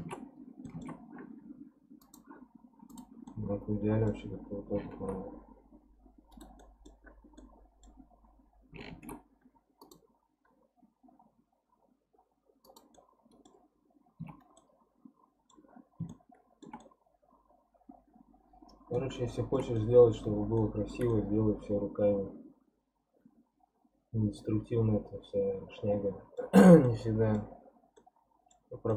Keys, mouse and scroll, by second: 0.4 scroll down 3, 0.7 alt+middle click, 0.7 alt+z, 2.0 click, 2.4 scroll up 1, 2.9 click, 3.3-4.8 middle drag, 4.8 ctrl+shift+r, 6.3-7.4 right drag, 7.4-8.9 middle drag, 8.9 ctrl+r, 12.9 scroll up 1, 13.0 middle click, 13.7-14.2 scroll down 1, 14.2 Tab, 14.6-15.8 middle drag, 15.8 scroll up 2, 16.1-24.1 shift+middle drag, 26.8-28.9 middle drag.